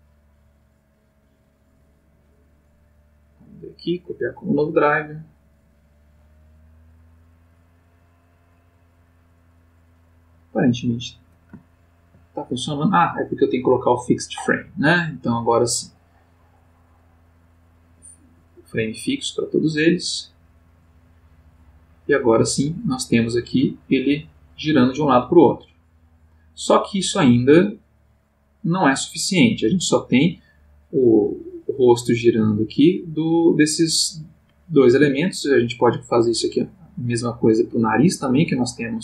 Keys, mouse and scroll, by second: 3.2 right click, 3.9 click, 5.6 click, 11.7 ctrl+middle click, 12.8 click, 13.6 click, 16.0 click, 17.0 click, 17.6 click, 20.7 click, 22.1 click, 23.1-35.3 drag, 34.9 Escape, 35.9 click, 38.4-39.0 drag.